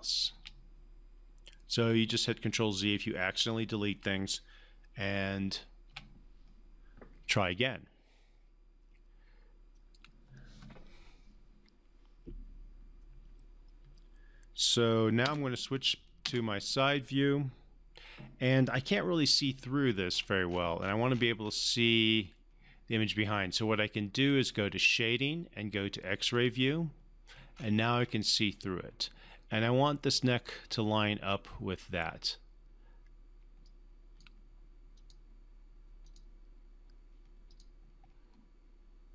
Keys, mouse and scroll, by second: 1.9-4.0 alt+drag, 5.9 Delete, 7.5-10.0 alt+drag, 15.3 space, 18.7 space, 18.8-19.4 alt+middle click, 19.6-20.1 alt+scroll down 1, 20.1 alt+scroll up 1, 20.6 alt+scroll down 1, 20.8-22.3 alt+scroll up 1, 24.2 click, 24.4 click, 27.6 scroll up 1, 33.4 scroll up 1, 33.6-34.2 alt+click.